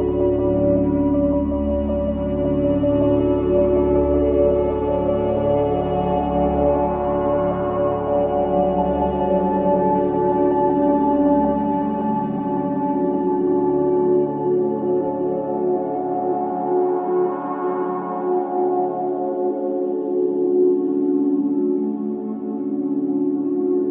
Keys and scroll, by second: 7.9 g, 14.7 space, 15.1 Escape, 15.9 ctrl+r, 17.8 ctrl+z, 18.5 g, 22.4 space.